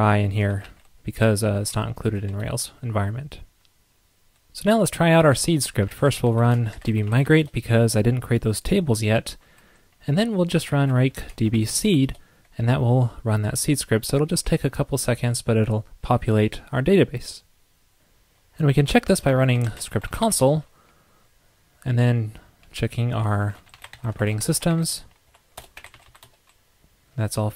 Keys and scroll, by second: 2.4 super+s, 17.9 super+k.